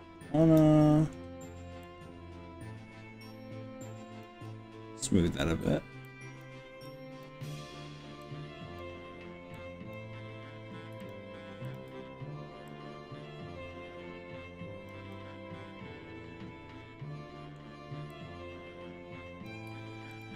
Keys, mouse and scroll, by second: 1.9 drag, 4.5-5.7 middle drag, 6.1 click, 6.9 click, 8.3 click, 9.6 click, 11.1 shift+click, 11.7 shift+click, 12.7 click, 15.1-17.6 middle drag, 18.1-19.5 drag, 20.1 shift+click.